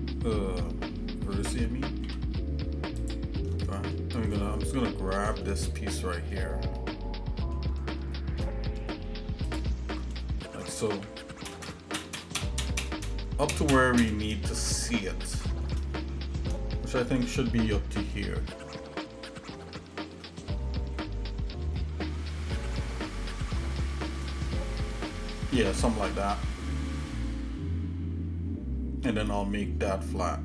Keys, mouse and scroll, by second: 2.1 x, 3.6 shift+middle click, 5.4 shift+middle click, 5.9 shift+middle click, 6.8 shift+middle click, 8.1 shift+middle click, 9.5 alt+shift+click, 10.2 shift+middle click, 11.5 ctrl+KP_Add, 11.8 ctrl+KP_Add, 12.0 ctrl+KP_Add, 12.3 ctrl+KP_Add, 12.4 ctrl+KP_Add, 12.7 ctrl+KP_Add, 12.9 ctrl+KP_Add, 13.2 ctrl+KP_Add, 13.6 ctrl+KP_Add, 13.8 ctrl+KP_Add, 14.1 ctrl+KP_Add, 15.2 shift+middle click, 17.6 scroll up 1, 18.2-19.3 shift+middle drag, 19.6 shift+middle click, 21.0-21.5 scroll up 1, 21.8 shift+middle click, 25.6 shift+middle click, 26.2 scroll down 1, 26.4-26.8 scroll down 2, 27.2-30.4 shift+middle drag.